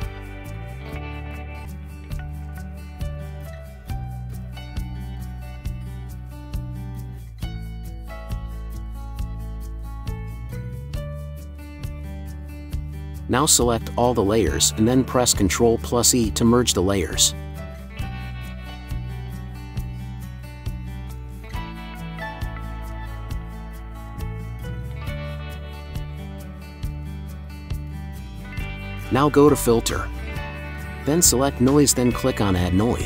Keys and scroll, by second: 3.1 ], 21.0 ctrl+z, 22.3 ctrl+r, 23.5 ctrl+e.